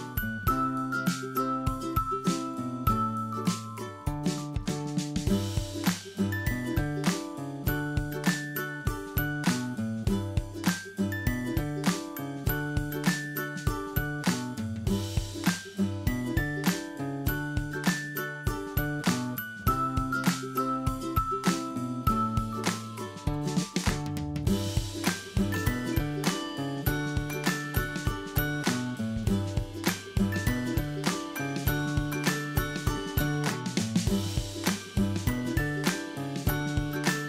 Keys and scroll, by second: 1.1 ctrl+Right, 3.3 ctrl+Left, 4.7 ctrl+Left, 9.5 ctrl+Right, 12.6 ctrl+Left, 13.3 ctrl+Left, 20.5 ctrl+Right, 24.2 ctrl+Left, 26.5 ctrl+Left, 29.3 ctrl+Left, 31.6 ctrl+Left, 34.0 ctrl+d.